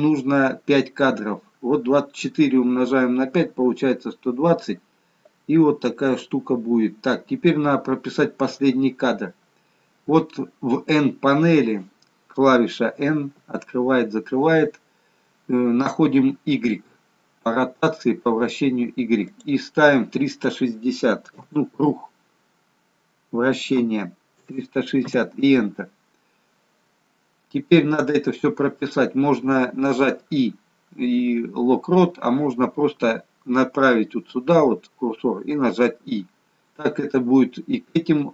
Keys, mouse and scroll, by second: 9.4-10.8 scroll down 2, 12.9 n, 13.4 n, 19.4 click.